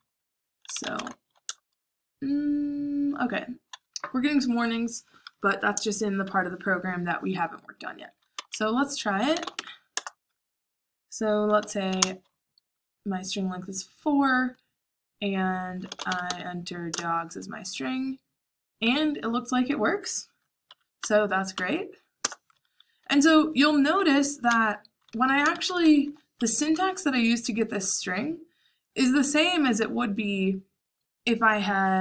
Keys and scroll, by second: 0.4-1.2 typing, 1.4 Return, 8.3-9.9 typing, 11.3-12.0 typing, 15.6-16.7 typing, 16.8 Return, 20.6 Page_Up, 21.5 Page_Up, 22.1 Return, 22.7-27.2 typing, 26.3 Escape, 31.9-32.0 typing.